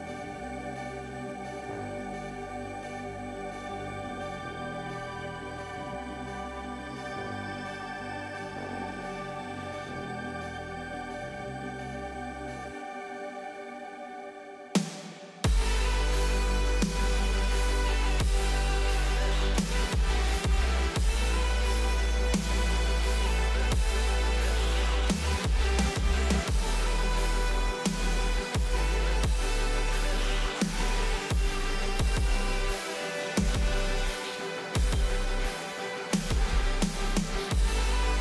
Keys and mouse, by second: 0.0 shift+a, 4.6 s, 6.0 g, 8.0 click, 9.2 click, 10.0 g, 14.9 click, 16.6-17.6 drag, 18.8 click, 21.1 s, 21.6 s, 23.5-24.8 drag, 26.0-27.0 drag, 28.8 g, 30.0 y, 30.0 y, 30.1 y, 34.3 click, 37.5 g.